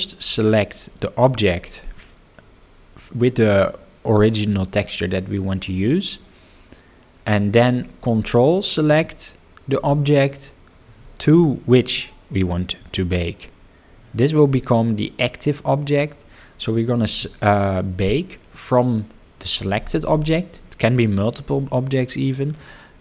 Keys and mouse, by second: 8.8 ctrl+click.